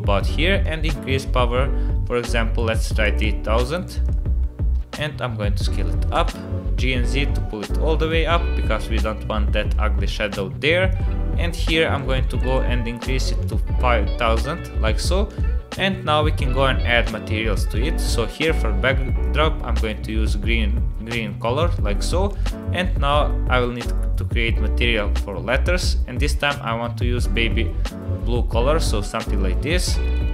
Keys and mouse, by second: 0.6-4.1 drag, 3.1 KP_0, 4.7 s, 7.7 g, 10.9-13.5 drag, 12.4 KP_0, 15.3 click, 16.9 click, 23.0 click, 30.0 click.